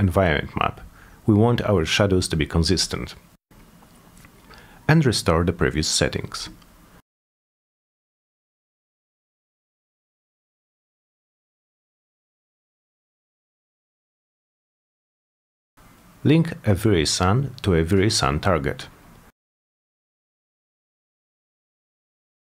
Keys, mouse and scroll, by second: 0.1 alt+middle click, 1.6 t, 2.2 z, 3.6 click, 4.3 click, 5.3 click, 5.7 click, 6.0 click, 6.8 click, 7.9 click, 8.4 click, 9.9 m, 11.0 click, 11.1 click, 11.7 click, 11.9 1, 12.3 Return, 13.1 click, 14.4 click, 15.7-19.0 drag, 19.9 q, 20.3 middle click, 21.4 click, 21.8 w, 22.3-22.5 drag.